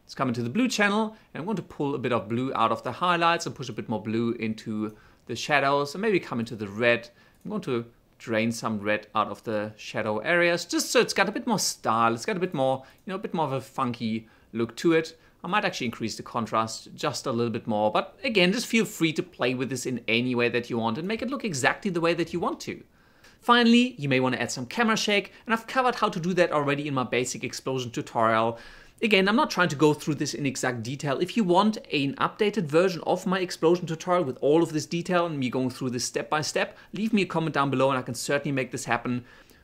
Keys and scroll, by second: 24.0 ctrl+a, 24.4 ctrl+shift+c, 24.8-26.2 typing, 28.0-29.3 typing, 31.1 Page_Up, 33.0 Page_Down, 35.3 1, 35.6 Return, 38.3 0, 38.4 Return.